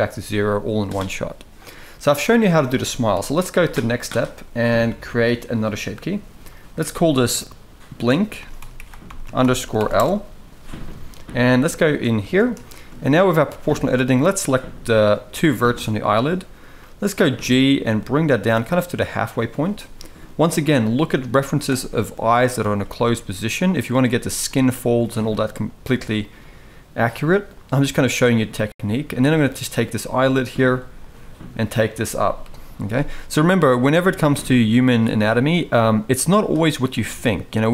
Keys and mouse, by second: 2.9 KP_1, 6.2 click, 6.4-9.7 drag, 11.6 shift+middle drag, 12.0 Tab, 12.4 shift+middle click, 13.2 alt+a, 13.7 click, 15.3 shift+click, 16.5 g, 19.3 click, 19.4 g, 20.4 click, 20.6 g, 22.4 click, 23.7 click, 23.7 g, 23.8 g, 24.8 g, 26.4 g, 27.6 g, 29.6 click, 29.7 g, 30.6 click, 30.9 g, 32.1 KP_3, 33.3 click, 33.5 g, 35.4 g, 36.6 g.